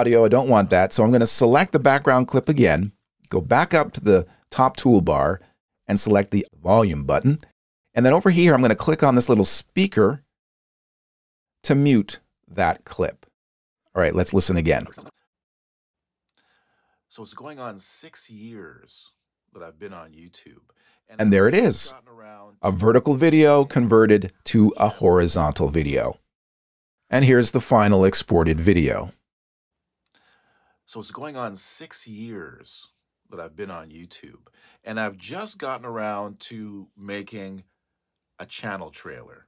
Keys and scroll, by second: 0.8 space, 15.8 space.